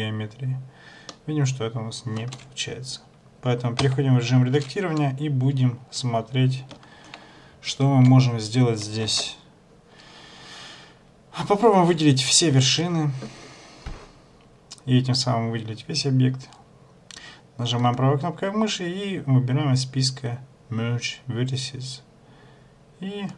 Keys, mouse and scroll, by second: 1.3 middle click, 3.9 Tab, 7.7 ctrl+1, 9.3 ctrl+a, 12.5 a, 13.0 a, 18.0 right click.